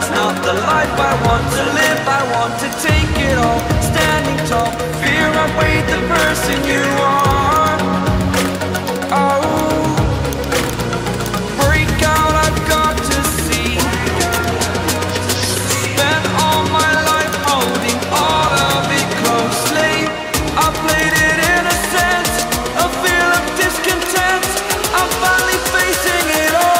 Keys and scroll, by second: 18.3 ctrl+alt+shift+e, 21.5 Return.